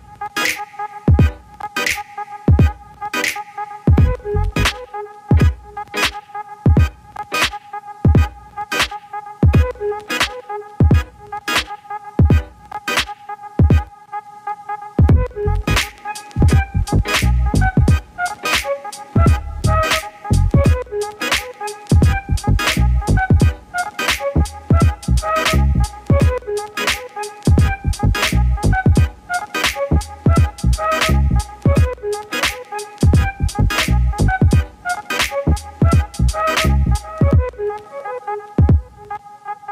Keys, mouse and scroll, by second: 1.0-1.9 drag, 1.9-3.1 middle drag, 3.1 scroll up 1, 3.2-5.3 middle drag, 5.3 alt+KP_0, 6.7 n, 7.6 click, 8.2 click, 8.4-10.5 shift+middle drag, 10.9-11.3 scroll down 1, 11.3-13.3 shift+middle drag, 14.1 click, 15.1 click, 18.1-20.8 drag, 21.6 click, 22.1 g, 24.0 click, 24.3 click, 24.8 g, 28.9 click, 30.5 click, 33.6-34.9 drag, 34.9 KP_0, 37.0 click, 38.0 click, 38.7 click, 39.2 click.